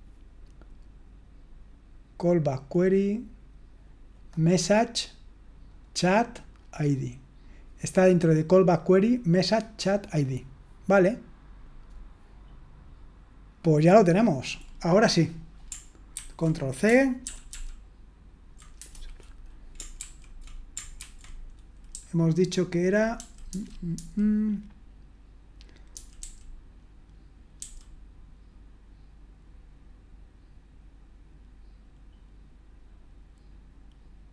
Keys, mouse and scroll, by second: 2.4-3.2 scroll down 2, 3.2-4.1 scroll down 1, 4.1-5.5 drag, 5.6-7.7 drag, 7.7-9.7 scroll up 2, 9.7-10.3 scroll down 2, 10.3-11.1 scroll down 1, 12.2-12.9 scroll down 1, 12.9-13.5 scroll down 1, 13.5 scroll down 1, 14.0-16.1 scroll down 1, 16.1 ctrl+c, 17.2 ctrl+p, 17.5 ctrl+p, 18.8 Return, 20.0 ctrl+d, 21.0 ctrl+d, 21.9-22.9 typing.